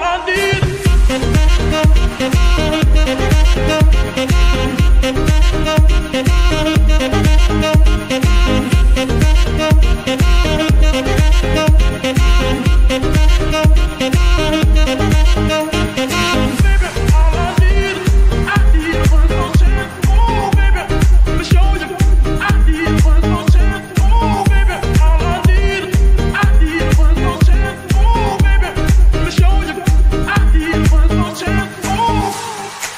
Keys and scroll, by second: 1.3 Escape, 7.9 ctrl+Tab, 23.6 ctrl+shift+z.